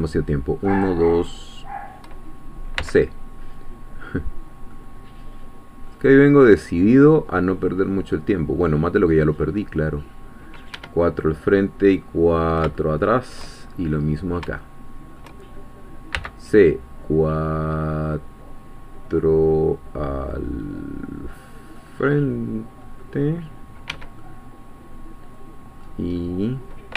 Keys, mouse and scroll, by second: 0.0 shift+click, 0.8-2.0 shift+drag, 2.8 c, 4.7-9.1 middle drag, 9.6 middle click, 10.7 Escape, 11.3 scroll down 1, 11.8-13.6 middle drag, 13.8-14.3 shift+scroll up 1, 14.7 shift+middle click, 16.1 c, 20.3 scroll up 2, 21.8 middle click, 22.8 middle click, 23.9 Escape, 24.2-26.1 middle drag, 26.1-26.9 scroll up 2.